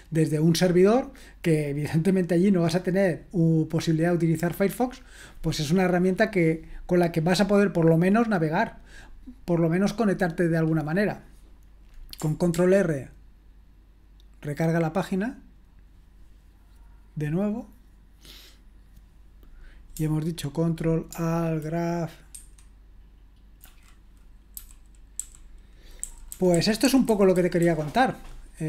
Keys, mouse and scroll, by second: 12.6 ctrl+r, 22.4 ctrl+\, 24.6-28.1 typing.